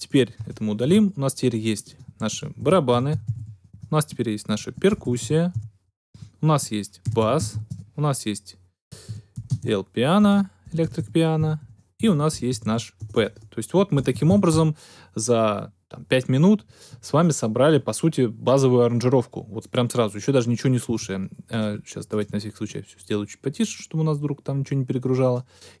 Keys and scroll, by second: 0.8 super+BackSpace, 2.3-7.8 typing, 6.1 Tab, 6.6 shift+Tab, 9.0-14.7 typing.